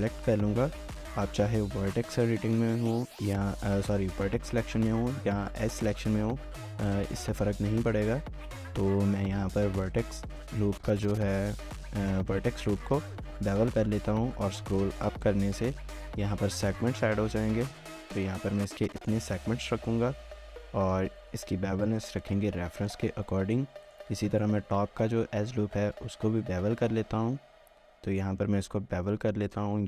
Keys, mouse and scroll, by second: 0.0 ctrl+b, 14.4-18.2 scroll up 1, 19.4 scroll down 1, 19.7 shift+middle click, 20.4 shift+middle click, 21.0 scroll down 1, 21.2 shift+middle click, 22.2 shift+middle click, 22.7 shift+middle click, 23.0 scroll up 1, 23.8 alt+click, 24.2 shift+middle click, 25.5 ctrl+b.